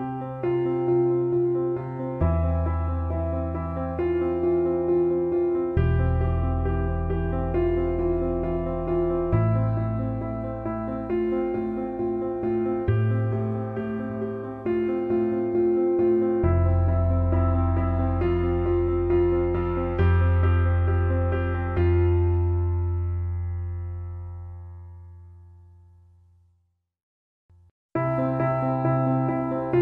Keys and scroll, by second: 28.6 ctrl+j.